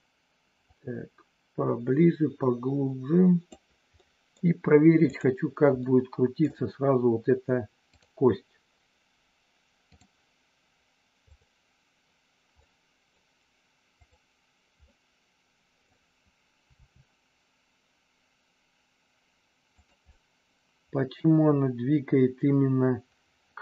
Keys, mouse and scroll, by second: 0.7-3.4 drag, 4.0 middle click, 5.0 click, 5.8 middle click, 8.0-10.0 drag, 11.2 click, 12.7 middle click, 14.0 click, 14.9 middle click, 16.7 r, 19.8 click, 20.0-23.6 middle drag.